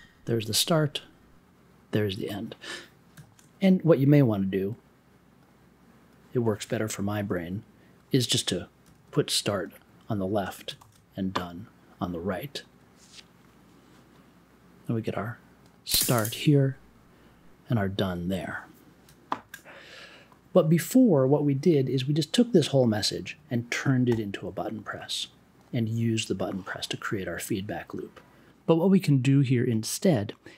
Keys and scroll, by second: 8.9 super+x, 10.4 space, 10.7 super+v, 24.1 b.